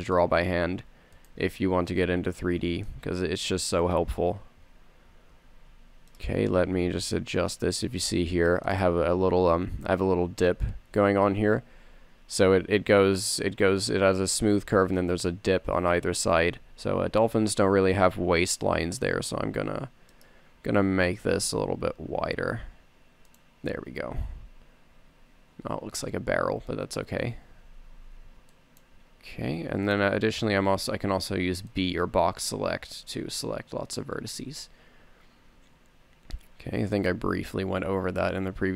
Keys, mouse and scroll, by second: 2.9 middle click, 5.6 a, 6.0 c, 7.1 z, 7.5 c, 9.5 z, 12.4 Tab, 16.7 Tab, 17.8 s, 21.2 s, 24.4 a, 24.7 Tab, 26.6 Tab, 27.5 z, 28.2 a, 28.5 a, 28.6 c, 30.6 middle click, 30.6 middle click, 31.5 b, 33.9 b, 34.8 z, 36.0 e, 37.5 click, 38.1 g.